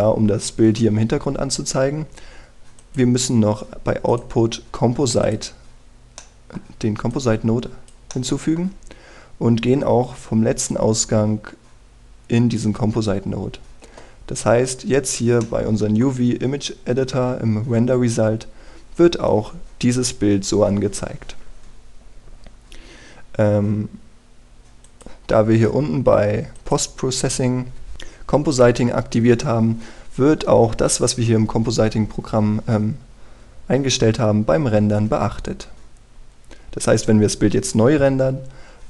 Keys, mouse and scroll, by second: 6.9 middle click, 7.8 click, 8.8 middle click, 11.4-13.3 drag, 15.5-16.1 scroll down 1, 16.1 middle click, 16.9-20.1 scroll up 1, 25.5 click.